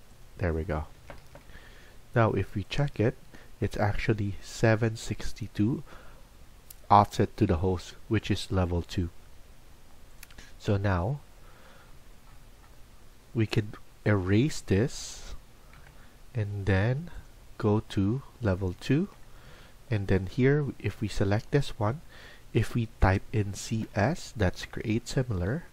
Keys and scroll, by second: 0.9 Escape, 1.2 Escape, 2.3 Escape.